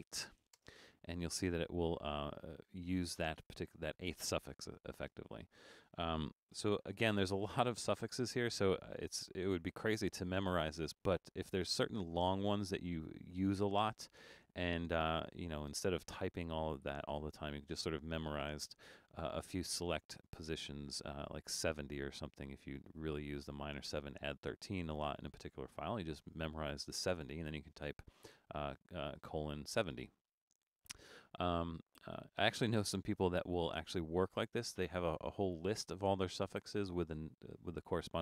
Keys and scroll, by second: 0.0-0.5 typing, 2.3 typing, 5.0-7.0 typing, 7.9 Return.